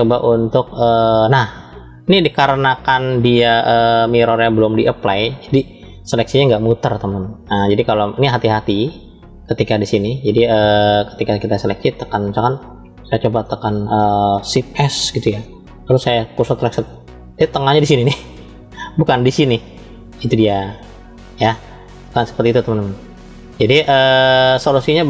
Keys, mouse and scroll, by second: 7.6 middle click, 8.8 scroll up 1, 9.4-11.8 middle drag, 12.4-13.4 middle drag, 15.0 shift+s, 20.1 ctrl+z, 21.6-24.0 middle drag, 24.2 scroll down 2.